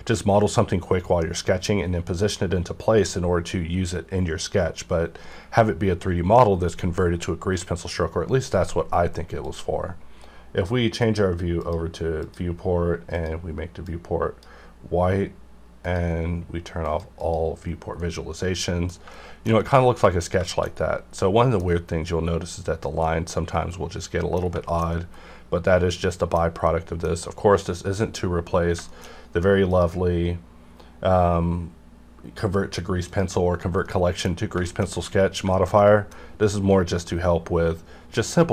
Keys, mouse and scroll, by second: 9.4 click, 13.9-15.8 drag, 18.0 middle click, 19.1 shift+middle click, 20.4 shift+middle click, 20.7 scroll up 1, 21.1 middle click, 21.6-23.0 scroll up 1, 23.0-24.4 middle drag, 24.4 scroll down 2, 24.7-26.4 shift+middle drag, 26.4-26.7 scroll down 2, 26.7 middle click, 27.3-28.6 scroll up 1, 28.7 scroll down 1, 28.9 shift+middle click, 29.7 click, 33.1 click, 33.9 middle click, 34.4-34.9 scroll up 2, 34.6 shift+middle click, 35.2 scroll down 1, 35.5 shift+middle click, 35.5-38.5 shift+middle drag.